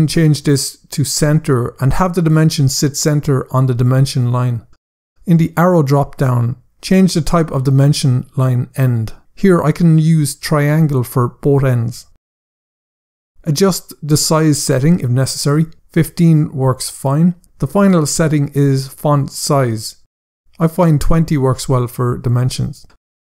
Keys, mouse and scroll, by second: 5.6 click, 10.7 click, 11.6 click, 12.8 click, 20.3 click, 21.3-21.9 typing, 22.1 Return.